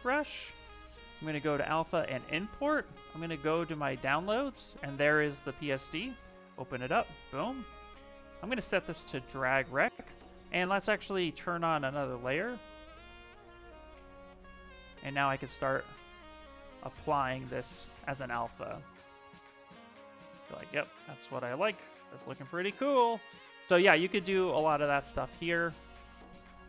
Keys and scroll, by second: 14.8 s, 17.5 ctrl+z, 22.7 s.